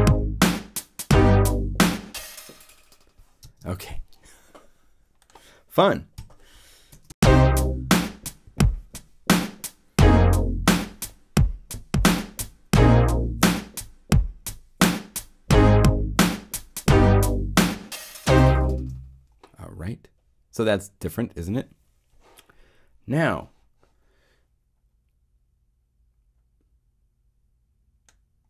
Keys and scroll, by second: 6.1 |, 6.9 0, 7.0 Home, 18.7 0.